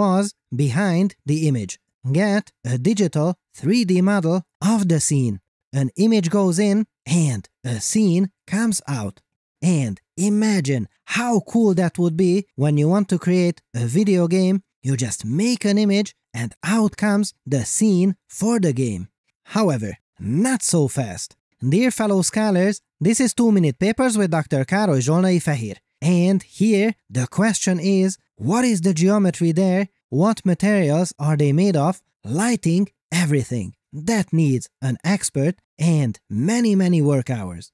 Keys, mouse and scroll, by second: 27.7 click, 32.5 space, 37.0 space.